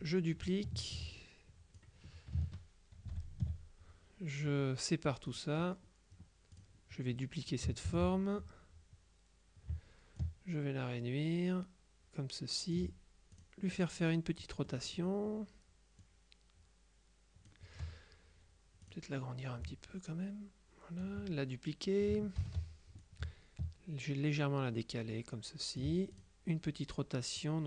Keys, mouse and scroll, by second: 3.2 ctrl+shift+k, 5.4 click, 6.6 click, 8.0 ctrl+d, 10.3-13.3 ctrl+drag, 13.4 click, 14.8 click, 16.1-18.1 drag, 18.9 click, 19.8-21.6 ctrl+drag, 22.5 ctrl+d, 23.1-26.8 ctrl+drag, 27.4-27.6 drag.